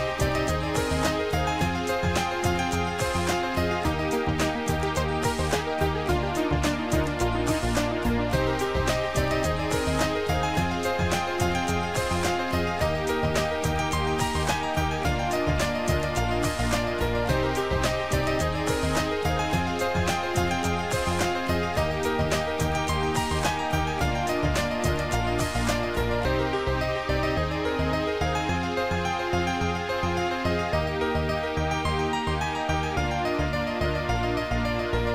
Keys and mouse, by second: 0.6 click, 2.5 click, 4.4 click, 8.1 click, 9.1 click, 15.1 click, 16.9 click, 19.6 click, 20.8 click, 22.6 shift+click, 26.1 shift+click, 29.2 shift+click, 29.8 click, 31.3 ctrl+z, 32.9 click.